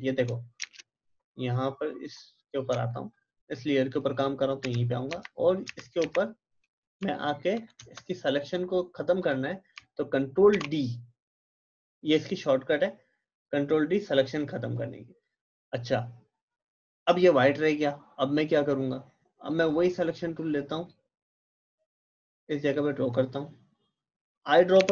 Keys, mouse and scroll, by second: 0.6 Return, 2.0 click, 4.6 shift+Right, 5.1 shift+Left, 5.7 shift+Right, 6.1 shift+Left, 9.2 click, 10.5 ctrl+d, 19.5-24.7 drag, 24.7 i.